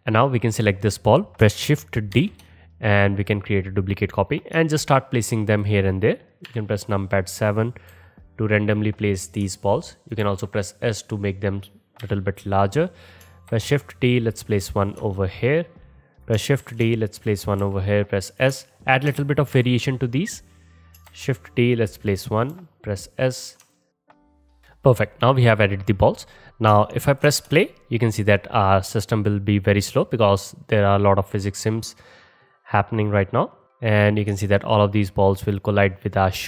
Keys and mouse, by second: 2.2 shift+d, 2.4-4.2 middle drag, 4.2 click, 4.6-21.0 alt+middle drag, 6.5 KP_7, 7.9 g, 10.2 s, 12.0 KP_3, 13.6 shift+d, 16.7 shift+d, 17.7 s, 19.6 KP_1, 21.2 shift+d, 22.6 s, 23.9 middle click, 24.0-24.5 typing, 24.0 shift+middle click, 24.4 middle click, 24.5 middle click, 27.5 space.